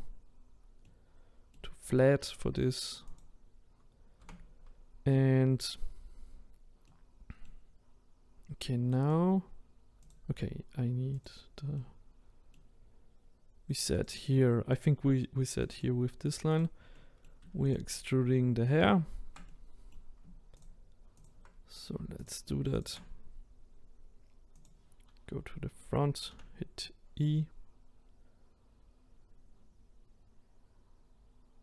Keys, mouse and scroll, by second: 3.2 click, 4.2 Tab, 6.8-9.1 middle drag, 9.1 click, 11.1 click, 11.8-14.0 middle drag, 14.0 click, 15.6 click, 17.0 middle click, 17.7 shift+click, 19.5-20.6 middle drag, 20.6 shift+click, 21.2 shift+click, 22.8 shift+click, 24.6 click, 26.3 e.